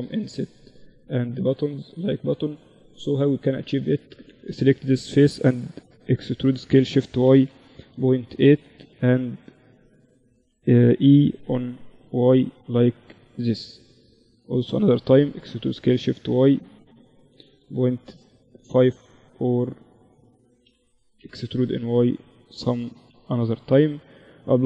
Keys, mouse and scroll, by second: 0.3 middle click, 0.6 Tab, 1.5 middle click, 2.4-4.5 drag, 2.9-4.9 right drag, 5.5 e, 10.9 e, 14.6 e, 19.9 e, 22.1 Tab, 23.5 ctrl+2, 24.5 Tab.